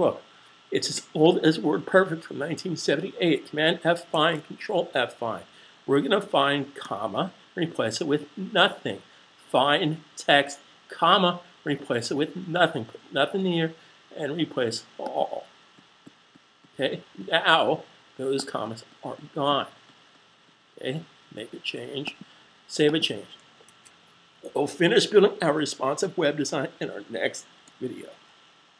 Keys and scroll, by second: 4.0 super+f, 6.5 ,, 23.5 super+s.